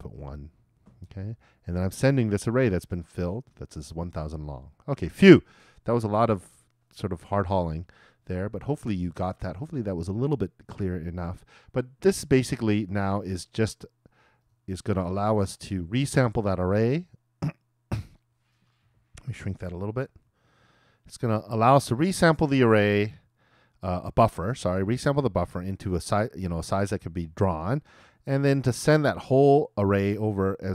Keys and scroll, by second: 20.2 super+-.